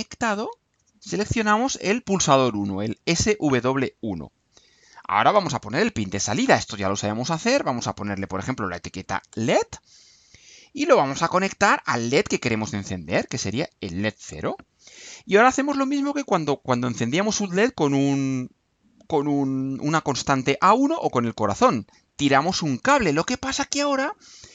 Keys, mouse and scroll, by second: 0.5 click, 3.1 click, 6.4 click, 7.3 click, 8.3-9.2 typing, 9.3 Return, 12.5 click, 13.1 click, 14.3 click, 22.5-24.2 drag.